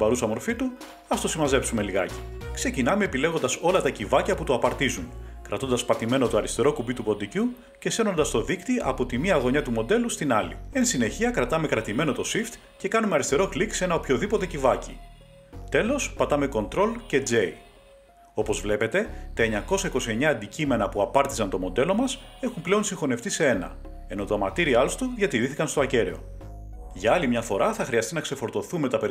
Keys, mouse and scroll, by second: 2.4 Page_Up, 8.3 click, 13.2 shift+click, 17.1 ctrl+j, 24.1 click, 26.7 click, 27.7 Tab.